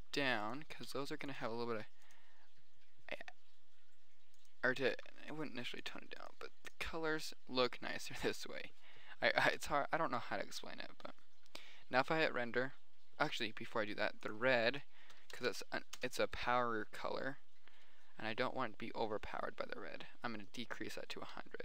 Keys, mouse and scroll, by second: 0.0 r, 0.5 drag, 1.1 g, 2.3 click, 2.9 click, 4.1 click, 9.5 middle click, 9.9 KP_0, 14.5 click, 14.9 middle click, 15.8 KP_0.